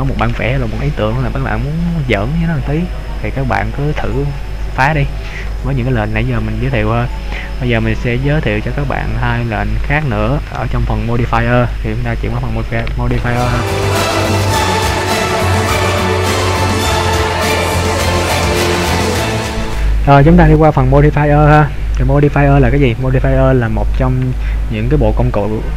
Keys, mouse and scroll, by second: 20.2 middle click, 20.2 scroll down 1.